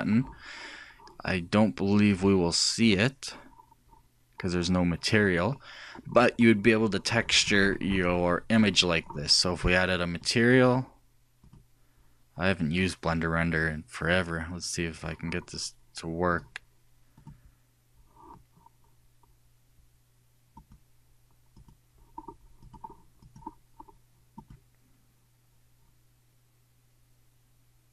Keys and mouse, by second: 3.7-5.6 drag, 8.2 click, 10.3-13.3 drag, 16.3-17.3 drag, 17.5-18.5 drag, 21.5-25.9 drag.